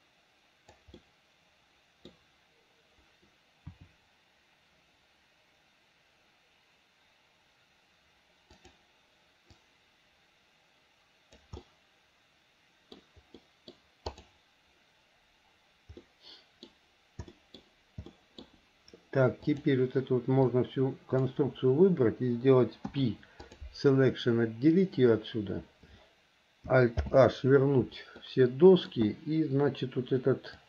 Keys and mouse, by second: 1.3-2.3 middle drag, 3.9 r, 9.7-11.6 drag, 11.7-13.2 middle drag, 13.6 middle click, 14.3 click, 16.2 middle click, 16.5 click, 17.5 middle click, 18.2 middle click, 19.8-21.6 drag, 23.0 p, 27.2 alt+h, 28.4 middle click.